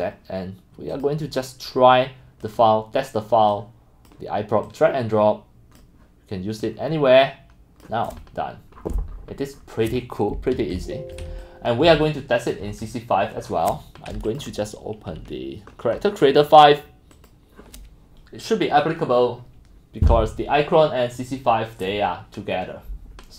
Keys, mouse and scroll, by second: 1.5 drag, 2.0 click, 2.6 click, 3.5 click, 4.6-5.0 drag, 5.0-5.8 middle drag, 6.0 middle click, 6.6 click, 7.4-7.8 drag, 8.8-9.8 scroll, 8.8 middle click, 10.7 click, 10.7-13.2 typing, 11.2 click, 11.9 click, 14.3 middle click, 14.4 click, 16.0 middle drag, 17.1 middle click, 22.2 click.